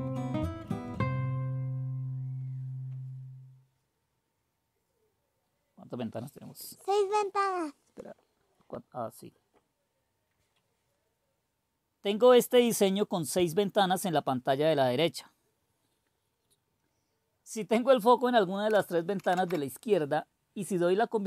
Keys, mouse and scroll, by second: 19.2 super+q.